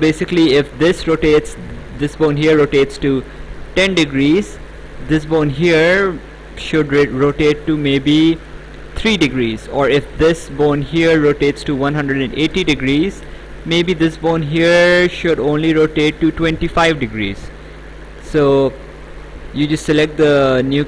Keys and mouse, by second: 4.8 click, 10.2 click, 13.9 click.